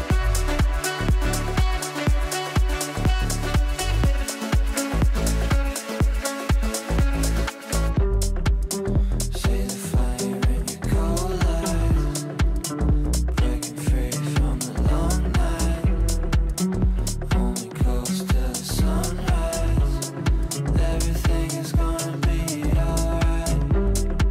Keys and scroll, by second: 13.5 Delete.